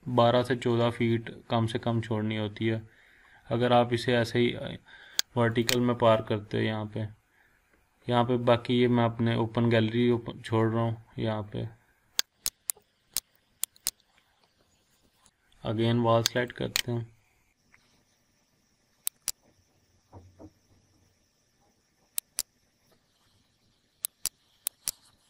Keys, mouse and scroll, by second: 5.5 click, 7.5-7.9 scroll up 1, 7.9 scroll down 1, 9.0-9.9 scroll up 1, 9.9-10.6 scroll down 1, 10.9 scroll up 1, 11.2 scroll down 1, 12.2 click, 13.5 scroll down 1, 13.7 click, 13.9 scroll up 1, 16.4 click, 19.2 click, 24.0 click, 25.1 scroll down 1.